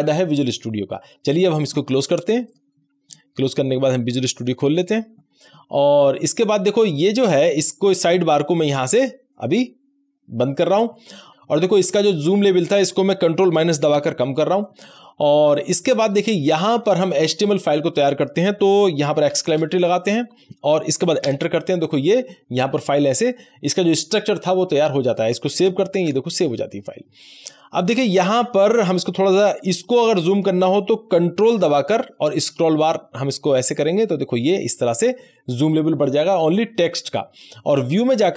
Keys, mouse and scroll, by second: 2.6 click, 9.4 click, 9.4 click, 13.6 ctrl+=, 13.9 ctrl+-, 19.2 ctrl+-, 19.4 shift+1, 21.2 Return, 25.6 Return, 25.9 ctrl+s, 28.9 click, 32.3 ctrl+scroll up 1, 33.5-35.1 scroll up 1, 35.1-35.8 ctrl+scroll up 1, 38.1 click.